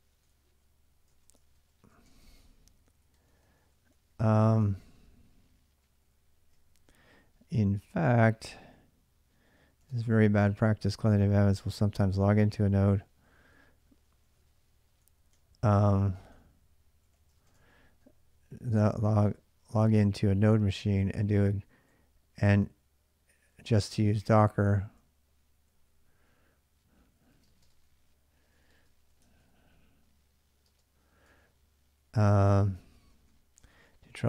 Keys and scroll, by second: 0.1 Return, 0.9-6.3 typing, 6.5 ctrl+[, 6.7 ctrl+j, 7.5-10.5 typing, 11.7-13.8 typing, 14.2 ctrl+[, 14.2 ctrl+j, 15.1-34.2 typing.